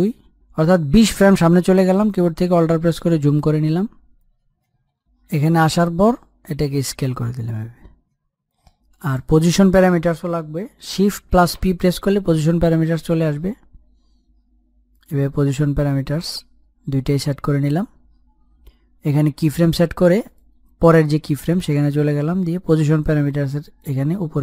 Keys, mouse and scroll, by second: 1.2 shift+Page_Down, 2.2-3.7 scroll up 1, 4.0-4.6 alt+scroll up 1, 5.2 click, 11.1 click, 13.5 shift+p, 17.0 click, 22.3 click.